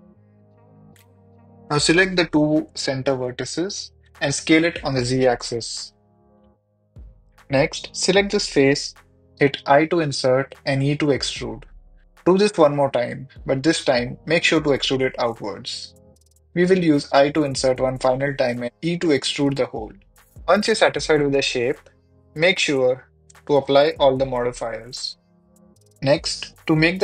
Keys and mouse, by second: 0.7 click, 1.0 g, 1.1 g, 1.6 ctrl+r, 2.5 click, 2.6 click, 2.8 1, 3.3 click, 3.9 s, 4.1 y, 4.4 z, 5.1 click, 5.7 shift+click, 5.8 shift+click, 6.0 s, 6.5 z, 6.9 Escape, 7.1 Tab, 7.2 Tab, 7.6 3, 8.2 Tab, 8.3 ctrl+a, 8.7 Tab, 9.2 i, 9.7 s, 9.7 z, 10.6 click, 11.0 e, 11.7 click, 12.5 middle click, 12.8 i, 14.1 click, 14.2 e, 15.5 click, 15.6 middle click, 16.6-18.8 typing, 17.1 click, 18.5 click, 19.0 Tab, 22.5 click, 22.9-23.4 drag, 23.7 click, 24.8 click, 25.8 click, 26.4 click.